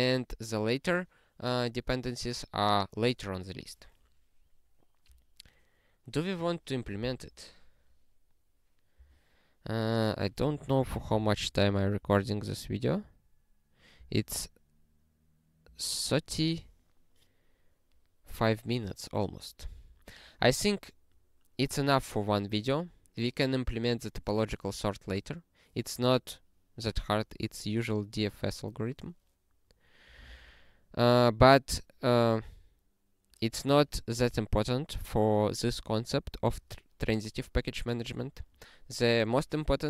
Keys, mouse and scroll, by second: 14.0 ctrl+p, 19.9 click, 31.1 scroll down 1, 32.3 scroll down 1, 33.6 scroll up 4, 34.5 scroll down 1, 35.9 scroll up 1, 38.2 click.